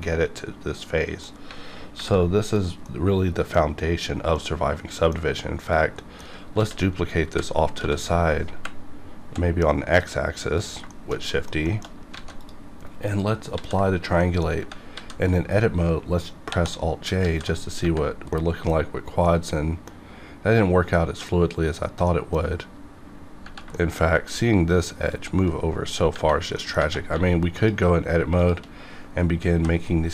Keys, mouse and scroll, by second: 2.0 alt+v, 2.4 click, 2.8-5.2 middle drag, 5.6 click, 6.0 middle click, 6.6-9.3 typing, 10.6 click, 10.9 shift+middle click, 11.7 shift+middle click, 11.9 shift+scroll up 1, 12.2 alt+a, 12.4 click, 13.5 ctrl+a, 14.2 middle click, 14.9 a, 16.5 alt+j, 17.2 alt+a, 18.3 middle click, 19.4-22.1 middle drag, 22.4 scroll up 1, 22.8 scroll down 1, 23.7 shift+middle click, 24.7 click, 26.6 middle click, 27.1 1, 27.6 click, 29.5 j.